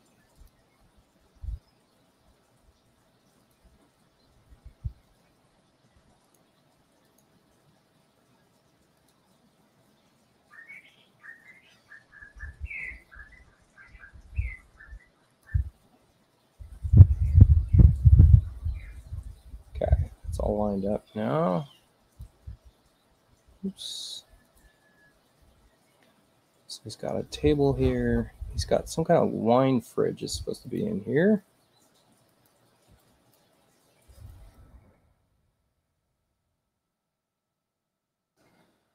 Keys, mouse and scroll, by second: 0.4 click, 3.4 click, 5.1 u, 6.2 click, 7.0 click, 9.0 click, 15.3 click, 22.1 click, 23.8 space, 24.5 click, 30.6 click, 32.3 click, 33.0 click, 34.0-35.9 typing, 37.5-38.9 drag.